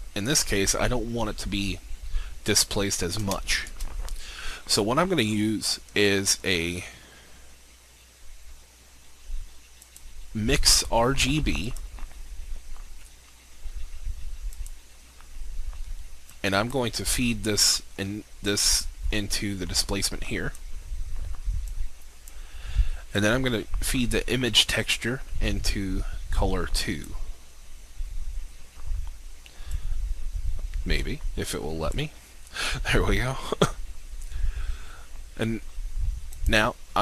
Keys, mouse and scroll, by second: 3.7 shift+a, 9.6-31.9 drag.